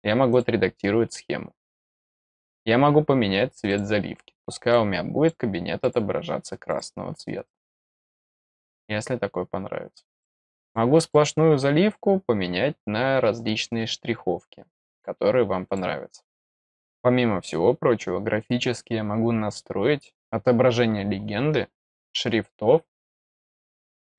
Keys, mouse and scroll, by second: 0.3 click, 3.6 click, 4.7 click, 5.8 click, 6.6 click, 10.2 click, 10.6 click, 11.0 click, 12.0-15.0 scroll down 4, 15.6 click, 20.9-21.3 scroll up 1, 22.0-23.7 scroll down 2, 23.7-24.1 scroll up 1.